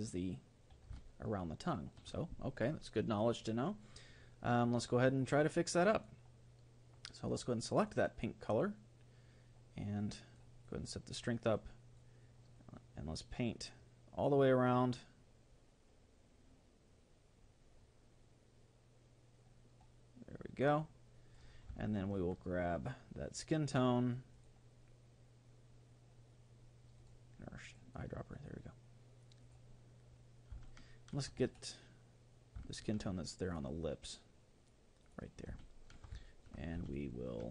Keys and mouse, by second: 1.1-3.5 middle drag, 4.9-7.9 drag, 10.1-14.3 drag, 21.9-24.3 middle drag, 24.3-26.1 drag, 27.0-29.5 drag, 30.7-32.5 middle drag, 32.7-35.1 middle drag, 33.5-35.1 drag, 35.6-37.5 middle drag.